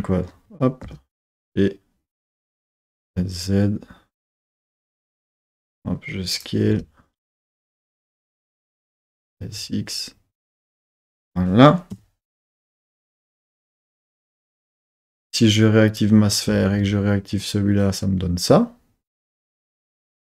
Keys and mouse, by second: 0.8 g, 2.3 click, 2.9 s, 3.0 z, 4.3 click, 4.8 g, 5.1 click, 5.2 s, 6.3 click, 6.6 g, 7.7 click, 8.2 s, 8.4 click, 9.1 s, 9.4 x, 11.0 click, 11.9 KP_3, 15.8 click, 16.4 z.